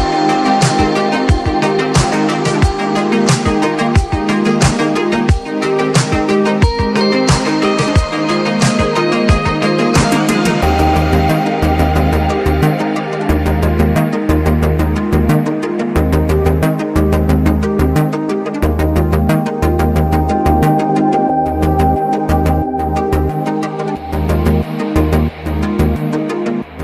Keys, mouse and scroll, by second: 2.6 alt+scroll down 1, 3.7-6.8 drag, 5.3 typing, 7.2-7.6 scroll up 1, 7.6 click, 7.7 click, 8.0-8.5 alt+scroll up 3, 8.4 typing, 8.8-10.4 scroll down 5, 11.6 click, 12.5 right click, 13.1 click, 14.9 space, 15.2 space, 17.4-21.2 drag, 24.5 click, 25.6 click, 26.6 typing.